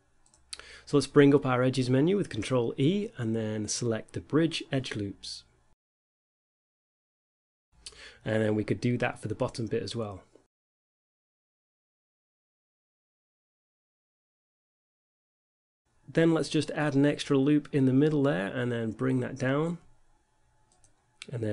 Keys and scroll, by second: 1.7 ctrl+e, 12.5 ctrl+e, 16.5 z, 18.2 ctrl+r, 19.1 z, 20.0 z.